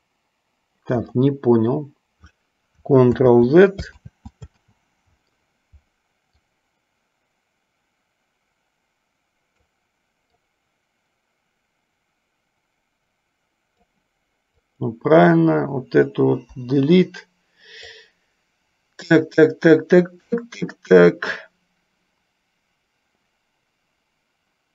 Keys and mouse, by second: 3.3 ctrl+z, 4.3 ctrl+z, 6.6-10.0 drag, 10.7-14.1 drag, 15.0 click, 16.7 Delete, 18.1-24.7 drag.